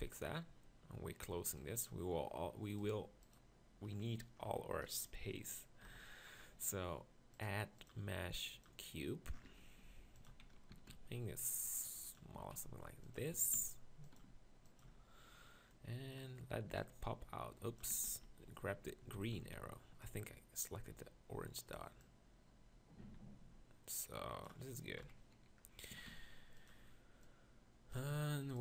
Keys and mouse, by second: 5.8 ctrl+KP_Decimal, 10.0 g, 10.3 z, 10.7 s, 12.4 s, 13.4 s, 14.2 g, 14.9 z, 19.2 ctrl+z, 20.3 ctrl+z, 20.5 click, 25.1 KP_1, 25.9 s.